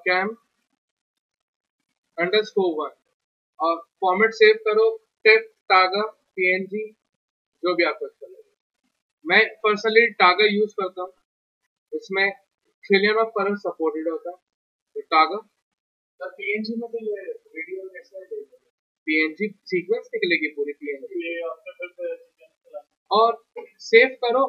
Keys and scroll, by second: 0.5 BackSpace, 2.1-2.4 typing.